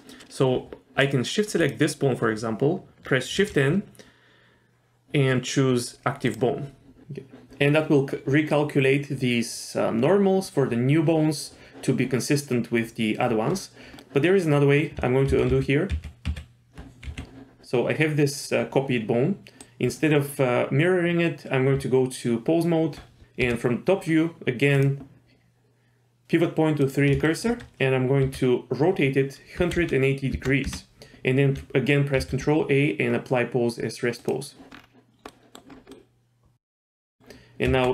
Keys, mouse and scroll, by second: 1.6 shift+click, 3.4 shift+n, 14.0 middle click, 15.3 ctrl+z, 15.5 ctrl+z, 15.9 ctrl+z, 16.3 ctrl+z, 17.1 g, 21.8 Tab, 23.4 KP_7, 24.8-26.9 drag, 27.3 shift+middle drag, 28.3 r, 32.2 ctrl+a, 34.7-35.3 scroll down 2, 35.3 middle drag, 35.7 scroll up 1, 35.9-37.1 middle drag, 37.7 Tab.